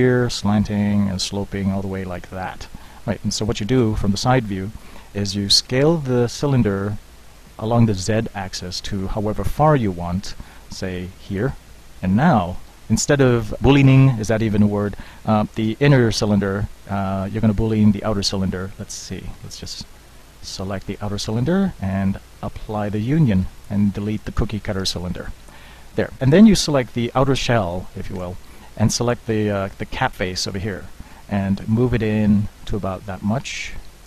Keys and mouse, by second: 3.8 KP_3, 5.7 s, 11.8-13.6 drag, 13.6 middle click, 17.6-19.2 drag, 19.6-24.0 drag, 24.9 Delete, 28.2 Tab.